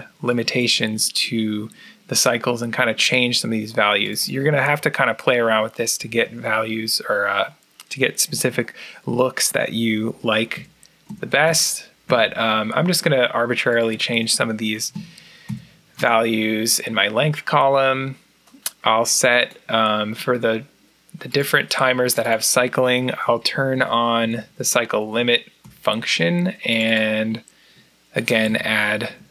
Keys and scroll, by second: 10.4 4, 10.9 Down, 11.3 Down, 11.9 4, 13.7-16.4 typing, 18.5-19.2 typing, 23.1 1, 23.3 Down, 23.6 Down, 24.1 1, 24.2 Down, 24.4 Down, 24.9 1, 25.1 Down, 25.5 1, 27.3-28.3 typing, 28.8 Down.